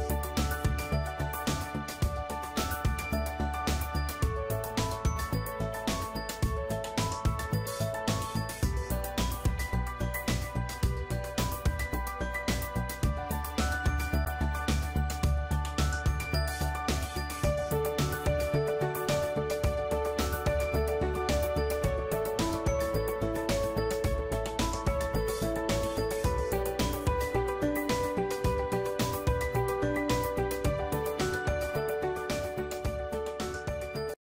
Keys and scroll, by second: 5.8 Return, 14.4 ctrl+alt+t, 18.9 Return, 20.3 ctrl+alt+shift+t, 24.6 ctrl+e, 33.5 ctrl+d.